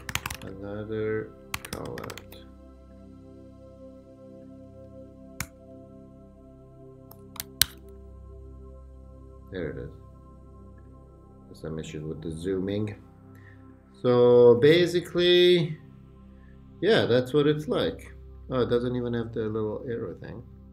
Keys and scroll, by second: 0.0-2.5 typing, 5.4 super+0, 7.6 super+1.